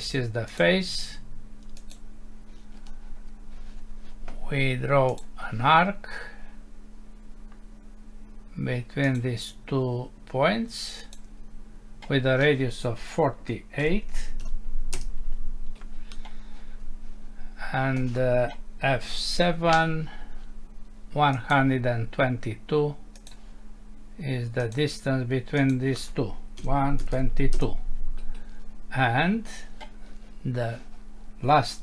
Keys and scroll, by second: 14.9 Return, 19.0 F7, 27.5 Return.